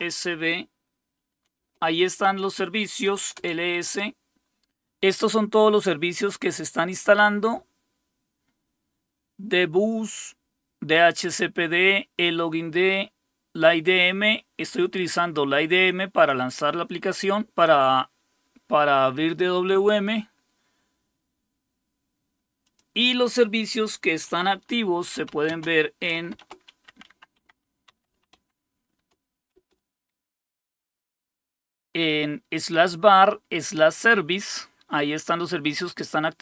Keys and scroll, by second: 0.0-0.1 typing, 1.3-3.7 typing, 24.9-30.0 typing, 27.4 Tab.